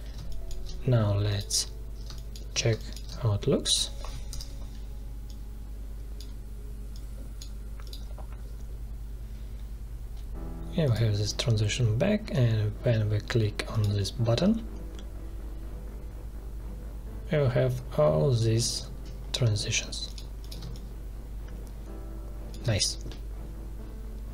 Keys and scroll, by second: 2.0 space, 4.3 ctrl+Return, 20.6 space.